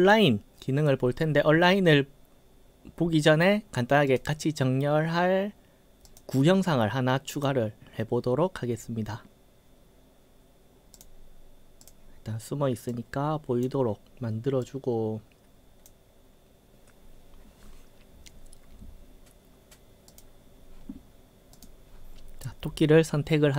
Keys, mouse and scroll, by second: 4.1 click, 6.0 click, 7.3 click, 11.0 click, 11.8 click, 12.9-13.7 drag, 14.7-15.9 drag, 20.1 click, 21.6 click.